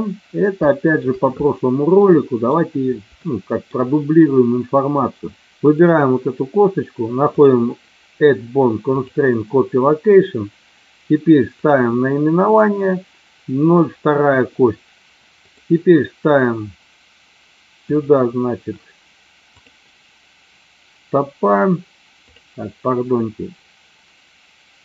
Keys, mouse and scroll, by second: 0.5-1.0 shift+middle drag, 2.0-2.4 middle drag, 3.2-3.6 shift+middle drag, 5.7 click, 7.4-9.2 drag, 11.6 click, 17.8 click, 22.2 click.